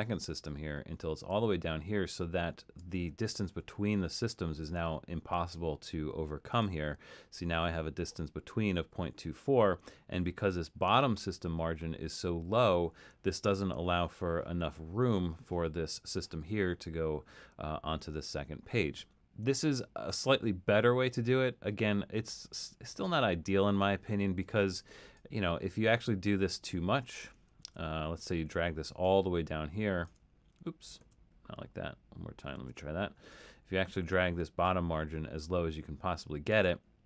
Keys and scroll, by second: 26.1 super+z, 27.6 super+z, 31.1 super+z, 32.5 super+z.